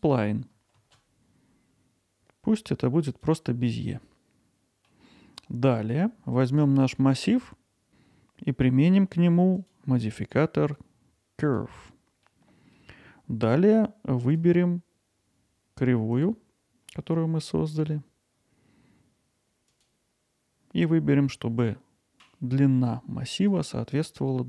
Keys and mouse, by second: 4.0-4.9 middle drag, 7.1 click, 9.7-11.6 drag, 12.3-12.7 middle drag, 14.2 click, 19.7-23.5 drag.